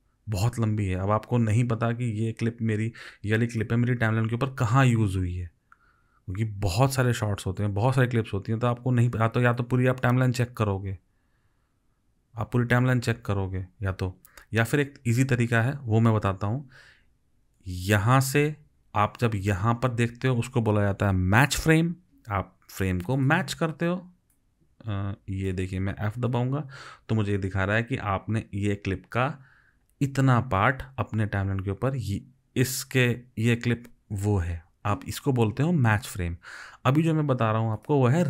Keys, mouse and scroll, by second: 26.2 f.